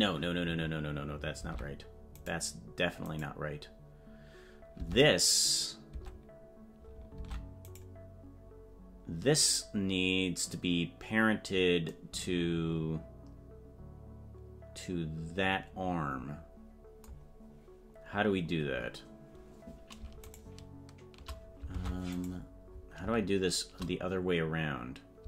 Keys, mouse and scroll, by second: 3.2 right click, 4.7 Tab, 7.2 Tab, 7.7-10.0 right drag, 17.4 scroll up 2, 20.2 shift+right click, 21.7 ctrl+Tab, 22.3 right click.